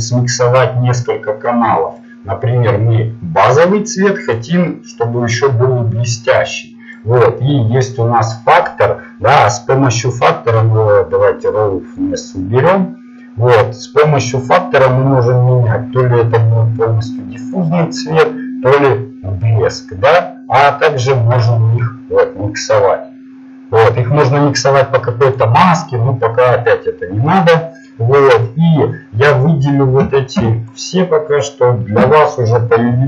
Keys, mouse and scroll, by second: 4.7 click, 5.7 click, 7.9-9.4 drag, 11.6-13.2 drag, 19.4-21.8 drag, 32.4 Delete, 32.4 a, 32.4 b.